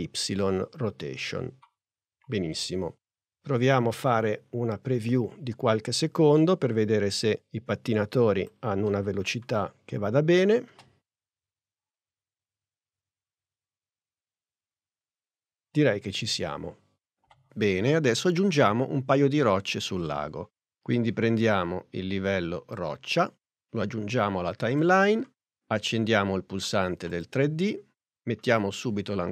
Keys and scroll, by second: 8.9 n.